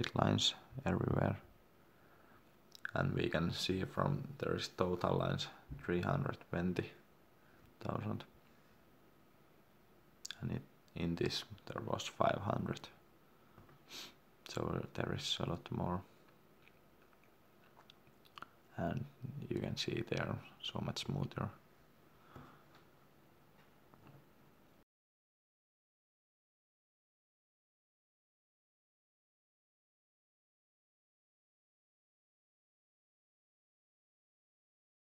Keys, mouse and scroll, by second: 8.3 click, 12.5 middle click, 13.3 shift+middle click, 13.9 ctrl+middle click, 15.0-15.9 scroll up 1, 15.9 middle click, 19.1 ctrl+middle click.